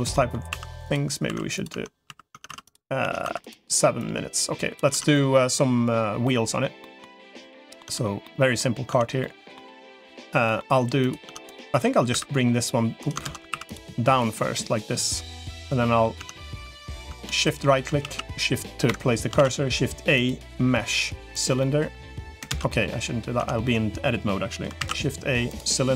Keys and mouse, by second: 0.0 middle click, 0.4-3.0 typing, 1.6 Tab, 2.2 Tab, 2.8 Tab, 3.8 click, 4.8 Tab, 5.0 middle click, 6.2 middle click, 6.6 middle click, 7.8 Tab, 8.2 middle click, 8.8 Tab, 9.2 middle click, 10.0 middle click, 10.8 click, 11.2 Tab, 12.0 e, 13.2 ctrl+z, 13.4 3, 14.2-15.4 drag, 15.4 middle click, 16.0 Tab, 16.6 Tab, 16.8 Tab, 17.8 shift+a, 19.2 shift+a, 21.4 middle click, 22.4 ctrl+z, 22.6 middle click, 23.2 Tab, 24.6 shift+a.